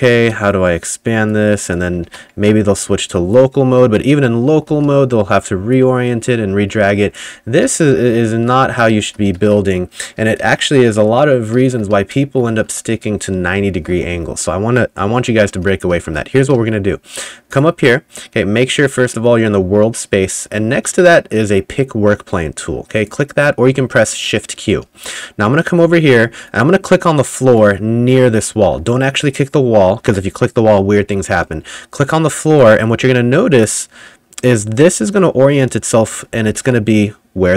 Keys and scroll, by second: 0.0-0.8 typing, 2.1 ctrl+z, 2.5 Tab, 4.8 r, 7.2-9.4 typing, 10.4 Delete, 11.3-14.2 typing, 15.4-17.2 typing, 24.8 w, 25.9 s, 26.3 w, 27.5 w, 36.0-37.5 typing.